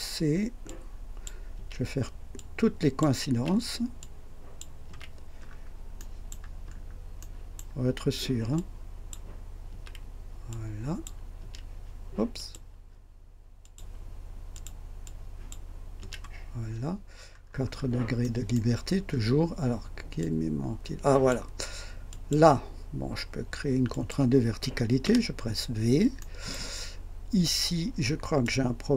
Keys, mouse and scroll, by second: 0.6-1.4 drag, 1.5 typing, 2.3-3.2 drag, 3.3 typing, 4.0-4.8 drag, 4.8 typing, 5.4 scroll up 1, 5.9 right click, 6.3 typing, 6.7 scroll up 1, 7.2 right click, 8.5-9.3 drag, 9.6 c, 10.5-11.2 drag, 11.4 typing, 12.3 click, 13.6 click, 14.5 click, 15.0-15.7 drag, 15.9 c, 16.0 c, 17.3-18.0 scroll down 2, 18.2 right click, 18.9 scroll down 2, 20.2-21.5 drag, 22.1 click, 23.9 click, 25.0 v, 26.2 right click, 28.4-28.9 drag.